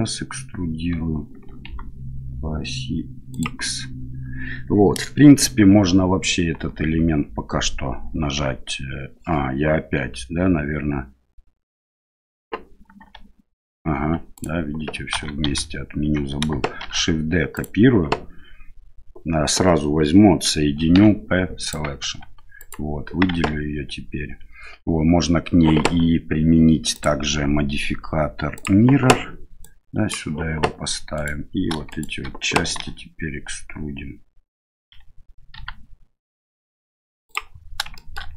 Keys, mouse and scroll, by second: 6.5 l, 8.3 p, 13.0 g, 15.1 ctrl+z, 15.4 ctrl+z, 16.8 shift+d, 20.9 p, 22.1 Tab, 22.6 right click, 23.3 Tab, 26.9-28.6 drag, 29.6-30.2 drag, 31.1 right click, 31.9 shift+right click, 32.8 e, 37.9 shift+middle click.